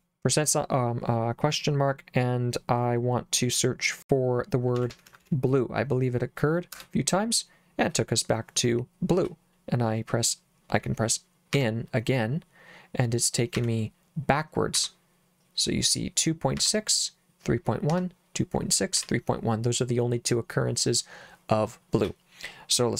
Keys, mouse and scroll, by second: 4.5-5.7 typing, 6.7 Return, 11.5 n, 13.5 n, 14.8 n, 16.5 n, 17.9 n, 19.0 n.